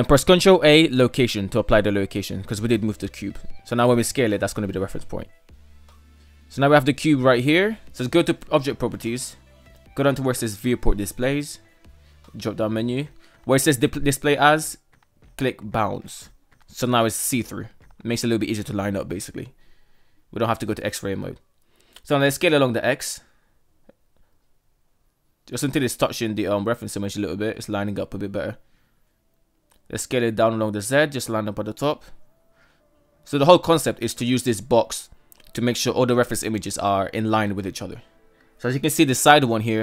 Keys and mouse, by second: 2.2 s, 4.0 middle click, 4.8-5.5 middle drag, 7.6 click, 10.2 click, 13.5-15.1 drag, 16.3 middle click, 17.2-18.2 middle drag, 18.7 KP_1, 21.8 s, 26.4 shift+middle click, 28.2 s, 29.2 s, 32.9-33.3 shift+middle drag, 35.2 shift+middle click, 36.7 KP_3, 38.1 shift+middle drag.